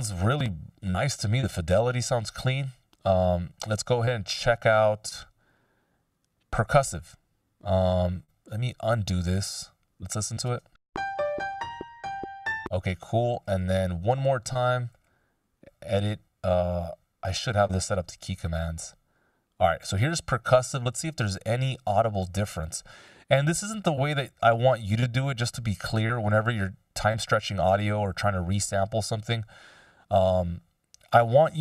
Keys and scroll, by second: 11.8 space.